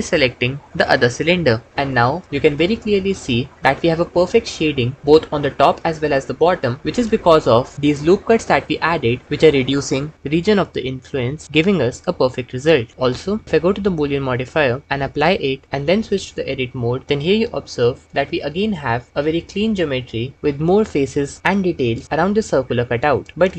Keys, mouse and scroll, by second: 6.8 Tab, 14.5 click, 16.1 Tab, 17.0 3.